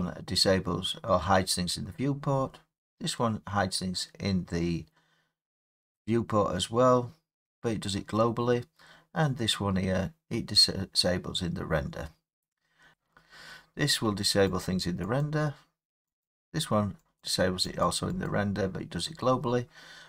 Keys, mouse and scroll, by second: 12.9 click, 14.6 click, 15.2 click, 16.2 click, 17.2 click, 17.8 click, 18.2 click.